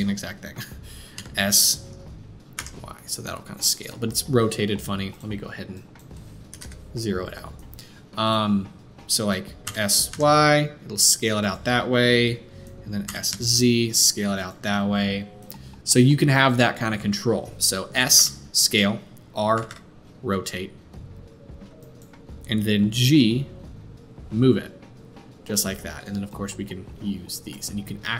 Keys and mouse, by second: 1.1 s, 5.1-5.7 middle drag, 5.7-8.4 drag, 8.4-13.0 middle drag, 9.6 s, 13.0 s, 18.1 s, 18.6-26.3 middle drag, 19.5 r, 23.0 g, 26.3-28.1 drag.